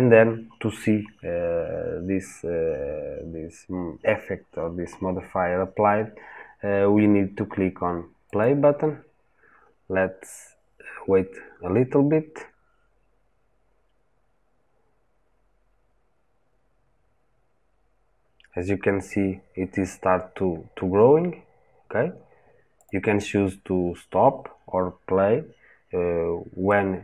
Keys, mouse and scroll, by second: 8.2 click, 22.7-26.5 drag, 26.5-27.0 middle drag.